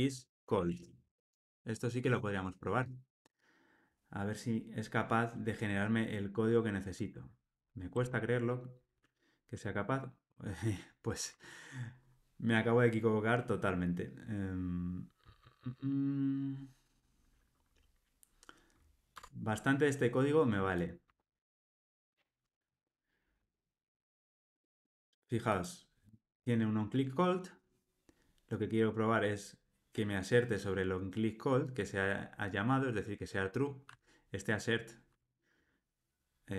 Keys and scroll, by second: 19.2 Tab, 34.5 super+b.